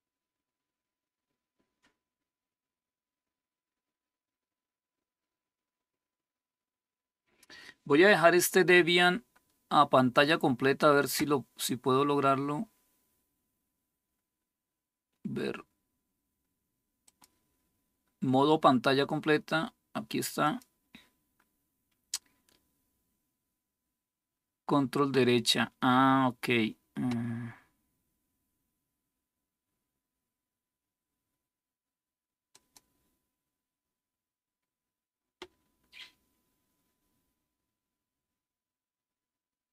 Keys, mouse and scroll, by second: 16.8 click, 20.2-39.7 drag.